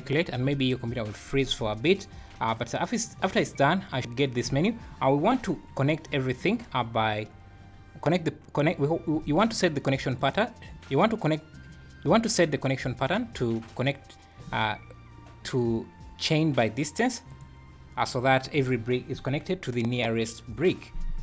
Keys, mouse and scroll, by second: 2.1 scroll up 2, 5.3 scroll up 2, 10.2 click, 13.0 click.